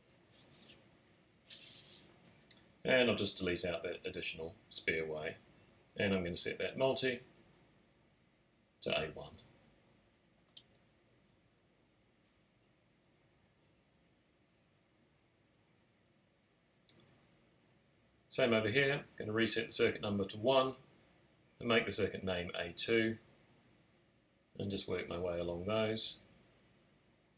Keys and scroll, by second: 3.5 BackSpace, 7.4-8.4 typing, 9.9-11.8 typing, 15.9 alt+shift+super+n, 17.0 Tab, 17.1 typing, 20.6 2.